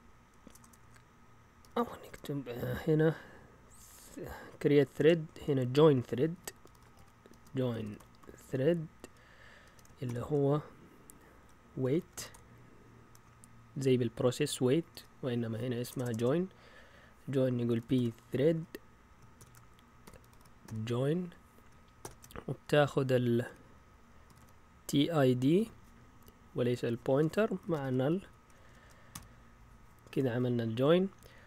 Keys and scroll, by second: 0.0-2.0 typing, 3.8-10.0 typing, 11.6-22.0 typing, 23.5-25.5 typing, 27.5-29.6 typing, 31.1 Down.